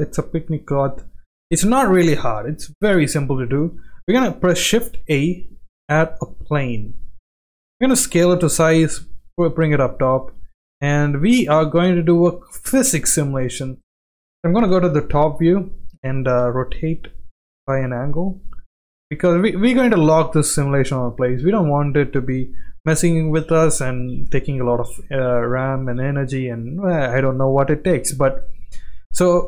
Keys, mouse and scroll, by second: 4.7 shift+a, 7.3 s, 8.2 g, 9.1 g, 10.4 g, 11.8-12.9 middle drag, 13.5-13.8 middle drag, 14.7 KP_7, 16.3 r, 18.2 g, 18.8 g, 20.4 g, 22.0-23.7 middle drag, 24.2 click, 24.6 g, 25.9-26.5 middle drag, 26.9-28.4 middle drag, 29.2-29.4 middle drag.